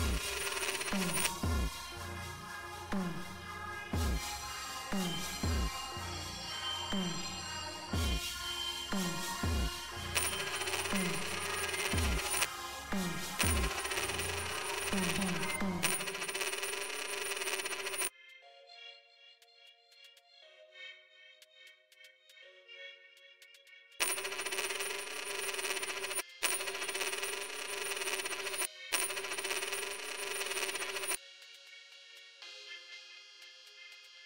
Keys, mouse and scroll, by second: 1.2 space, 4.6 click, 6.3 click, 7.9 right click, 8.9 click, 10.1 space, 12.9 space, 15.5 space, 18.1 space, 19.4 click, 20.4 click, 22.2 right click, 23.3 click, 23.9 space, 26.1 space, 28.5 space, 31.0 space, 33.1 right click.